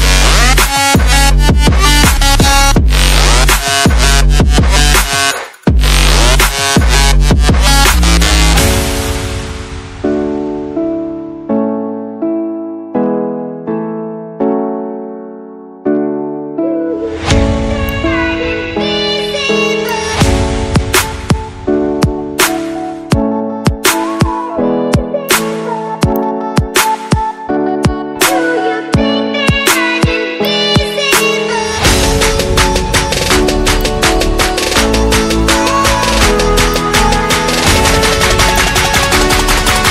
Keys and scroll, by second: 31.2 ctrl+t, 31.7 ctrl+t.